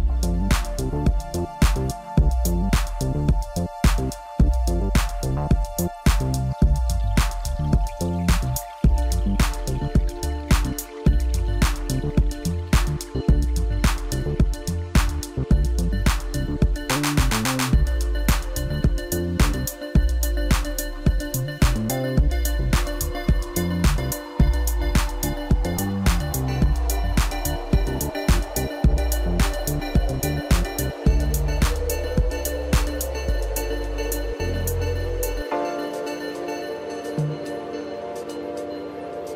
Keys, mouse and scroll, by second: 0.6-4.7 drag, 9.1 click, 16.3 click, 17.2-17.9 drag, 18.7 click, 24.9-25.8 scroll up 1, 25.8 Tab, 26.4-26.8 scroll down 1, 26.8-28.3 middle drag, 28.3-29.0 scroll up 2, 29.0 click, 29.7 shift+click, 30.1 shift+click, 30.6-31.9 middle drag, 31.9 shift+click, 32.4 shift+click, 33.0 shift+click, 33.5 middle click, 34.2 shift+click, 34.6 shift+click, 35.1 shift+click, 35.6-36.7 middle drag, 36.7 shift+click, 37.1 shift+click, 38.5 shift+click, 39.1-39.3 middle drag.